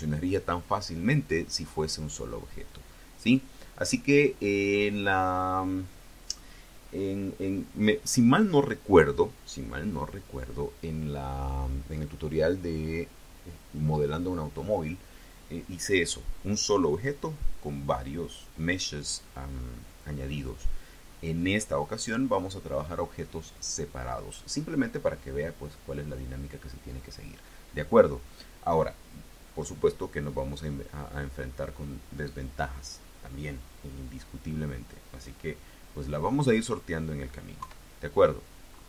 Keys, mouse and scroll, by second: 37.4 KP_3.